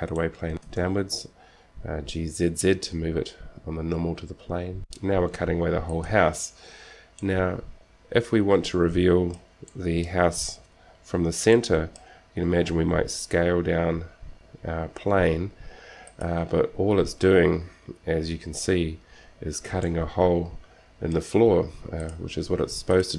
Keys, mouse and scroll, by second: 0.0 right click, 0.4 click, 0.6 g, 5.1 alt+r, 5.1 g, 7.4-9.4 middle drag, 9.9 middle click, 11.1 KP_7, 13.5 s, 20.1-21.9 middle drag, 22.3-23.1 drag.